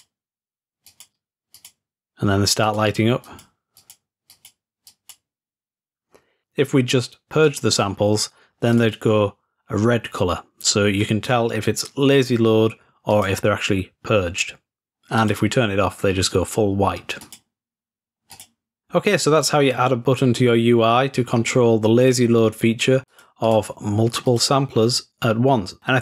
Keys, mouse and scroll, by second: 0.9-2.3 drag, 2.7 click, 3.8 click, 4.3-6.1 drag, 7.5-8.5 drag, 8.8-9.7 drag, 13.1 click, 15.2 click, 17.2 click, 18.4 click, 23.1-24.2 drag, 24.3-25.2 drag.